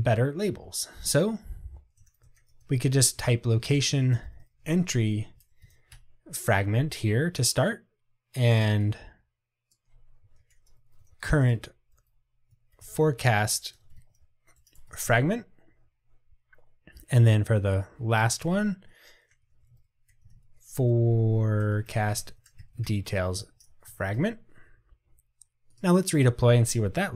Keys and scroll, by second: 25.9 ctrl+r.